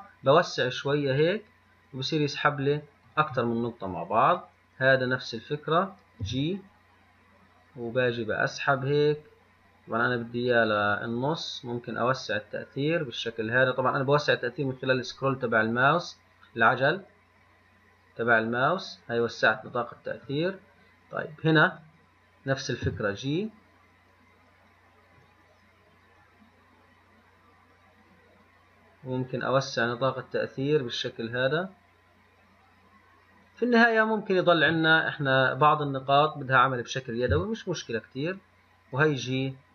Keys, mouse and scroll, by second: 19.8-39.7 right drag.